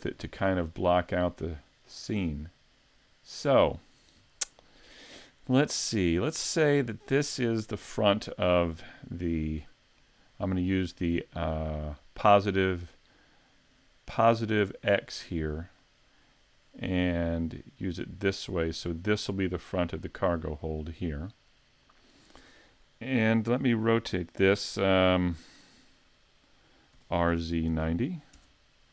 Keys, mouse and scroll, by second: 0.2-1.3 scroll down 1, 1.9 middle click, 2.9-3.4 scroll up 1, 6.0 middle click, 15.8 middle click, 18.6 middle click, 22.8 middle click, 27.0 r.